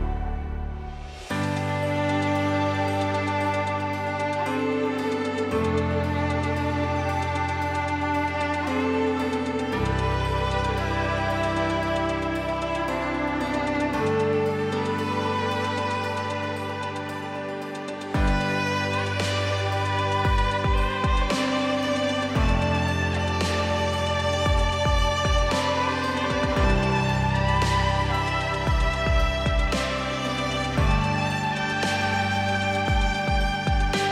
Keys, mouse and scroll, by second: 1.5-5.1 drag.